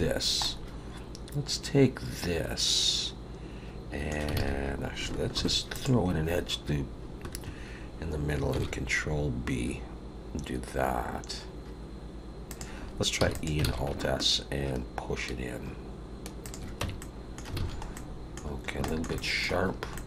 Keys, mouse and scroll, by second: 0.4 middle click, 4.4 alt+a, 5.3 ctrl+r, 8.6 ctrl+b, 13.2 e, 13.8 alt+s, 16.8 Tab, 17.0 middle click, 17.5 alt+a, 17.9 middle click, 18.5 scroll down 2, 18.8 shift+middle click, 19.1 middle click, 19.7 scroll up 2, 19.9 middle click.